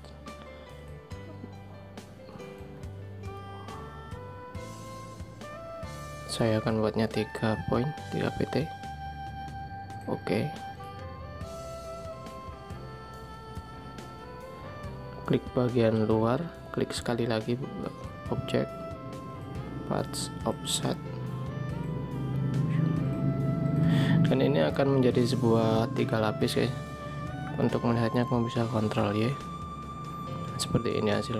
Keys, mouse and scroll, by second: 14.0 alt+scroll up 1, 30.5 ctrl+y.